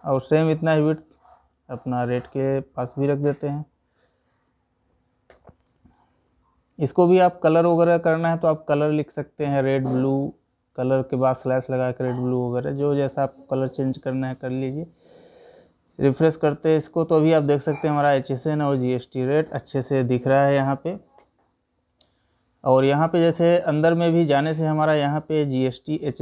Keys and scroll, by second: 1.0 ctrl+c, 5.5 ctrl+v.